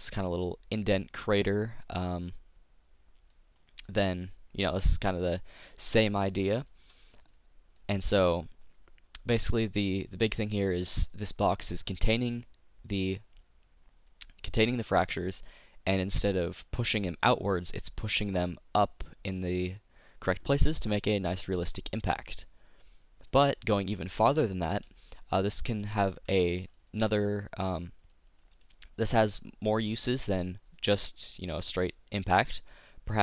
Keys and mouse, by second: 0.9 middle click, 1.2 middle click, 2.0 middle click, 4.3-6.2 middle drag, 6.7-8.5 drag, 8.5-9.5 middle drag, 11.7-15.9 middle drag, 19.4-22.2 middle drag, 23.2-29.2 drag, 30.7-31.7 drag.